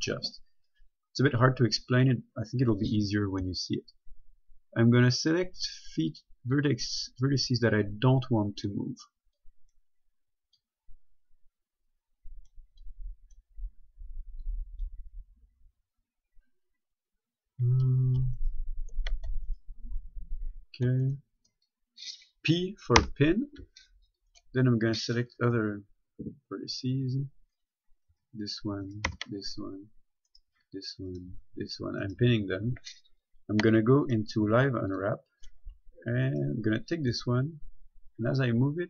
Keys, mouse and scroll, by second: 3.6 ctrl+Num_Lock, 3.9 ctrl+click, 18.6 shift+right click, 19.7 shift+right click, 21.3 shift+right click, 23.2 p, 24.5 right click, 28.4 p, 29.1 right click, 29.3 p, 30.5 right click, 30.8 p, 31.4 right click, 31.6 p, 32.3 right click, 32.5 p, 34.3 click, 36.5 right click, 37.3 g.